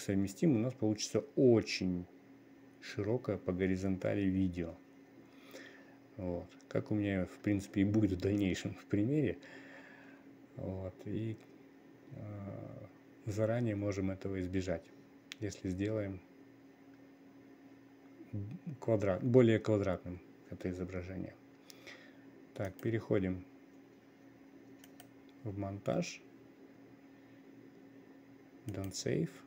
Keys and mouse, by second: 23.2-29.4 drag.